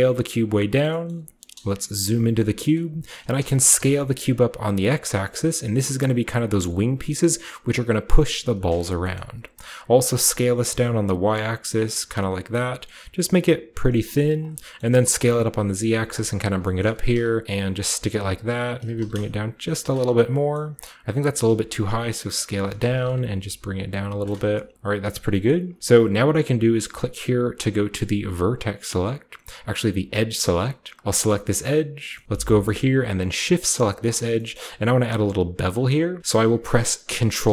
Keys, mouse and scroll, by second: 0.2-1.9 drag, 1.9-3.7 typing, 2.5-3.5 scroll down 1, 6.8 click, 8.3 middle click, 9.0-10.2 scroll up 2, 9.1-10.4 middle drag, 10.2-10.8 scroll up 1, 10.2 s, 10.6 y, 14.2 click, 14.4 middle click, 14.4-15.8 scroll down 1, 14.9-18.9 typing, 15.8-17.4 drag, 16.6-18.2 scroll up 2, 16.7-17.8 middle drag, 17.6 click, 19.9-20.4 shift+scroll down 1, 20.1 typing, 20.5-22.4 shift+middle drag, 21.2 typing, 22.4 click, 22.5 typing, 24.0 shift+click, 24.2 shift+scroll down 1, 25.0 middle click, 25.1-27.6 scroll up 3, 25.4 middle click, 28.4 click, 30.0 click, 31.0 middle click, 31.9-32.6 scroll down 1, 32.6-33.8 scroll up 1, 33.8-36.1 shift+middle drag, 33.8-34.1 shift+scroll up 1, 34.8-36.1 shift+scroll down 1, 36.1-37.4 scroll down 1, 36.2-37.5 middle drag, 37.4 ctrl+b.